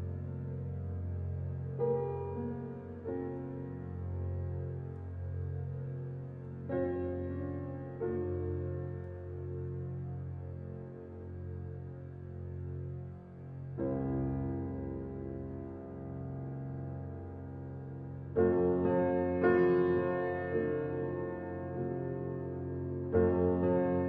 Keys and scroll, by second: 17.4 ].